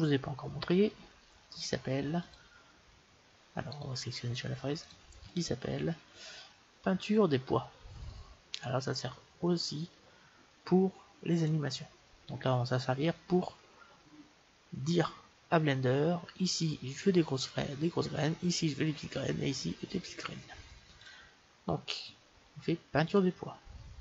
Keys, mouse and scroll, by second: 2.2-4.0 drag, 3.7-4.8 right drag, 4.8-6.6 drag, 20.9-22.7 drag.